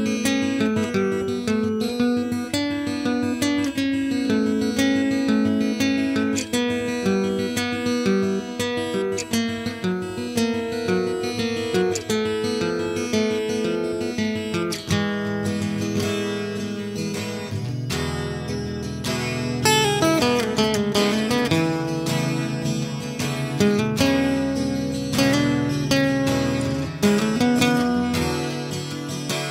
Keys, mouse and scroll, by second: 5.8 middle click, 6.3 z, 8.2-9.7 typing, 8.6 Tab, 9.0 Tab, 9.0 middle click, 9.2 Tab, 12.2 z, 12.5 a, 12.8 Tab, 13.0 a, 13.2 g, 14.3 ctrl+KP_Subtract, 14.5 a, 15.3 ctrl+KP_Add, 15.6-18.0 typing, 18.5-19.4 drag, 19.0 s, 20.4 shift+d, 20.6 s, 22.1 ctrl+KP_Subtract, 22.3 a, 22.8 click, 22.9 s, 26.1 s, 27.8 a, 28.7 shift+s, 29.1 shift+a.